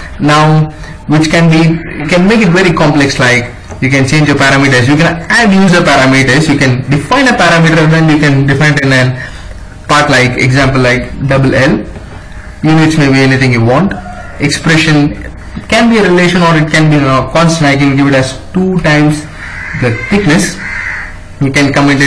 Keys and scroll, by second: 0.0 Escape, 10.8 shift+l, 17.7 2, 19.3-20.2 typing.